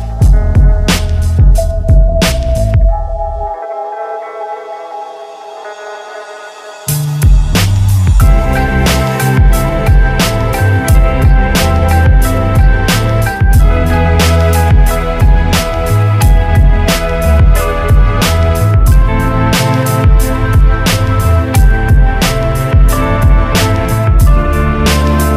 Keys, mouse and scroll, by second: 0.6 ctrl+Tab, 4.4 ctrl+alt+w, 6.7 KP_1, 16.4-17.9 drag, 22.5 ctrl+Tab.